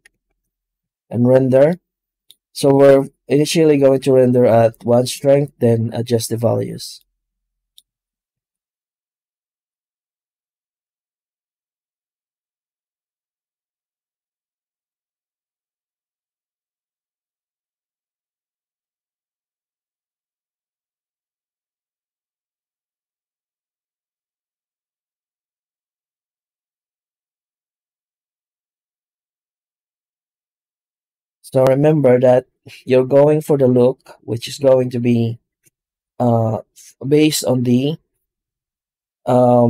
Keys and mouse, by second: 0.0 ctrl+space, 6.9 middle click, 8.6 z, 9.3 z, 14.9-16.9 drag, 18.7-19.9 drag, 21.4-22.6 drag, 24.1-24.7 middle drag, 25.9 middle drag, 27.3 middle drag, 28.4 middle drag, 30.2 shift+middle drag, 30.7 z.